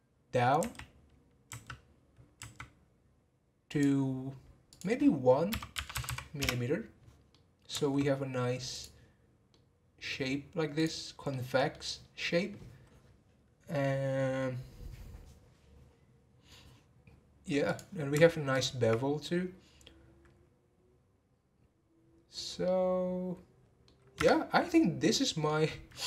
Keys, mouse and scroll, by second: 0.6 e, 4.7-6.1 drag, 6.1 m, 7.3-8.7 middle drag, 8.7 click, 9.5-10.8 middle drag, 10.8 click, 11.3-14.5 middle drag, 17.6 click, 22.6-24.2 middle drag, 24.2 Tab, 24.5-25.4 scroll down 1, 25.4-26.0 middle drag.